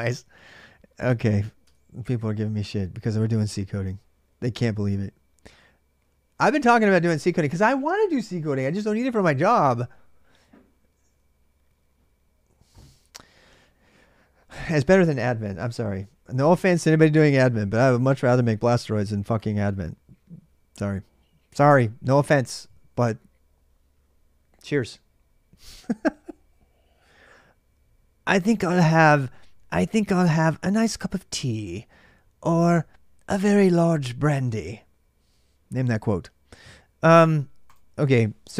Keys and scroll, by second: 38.4-38.5 typing.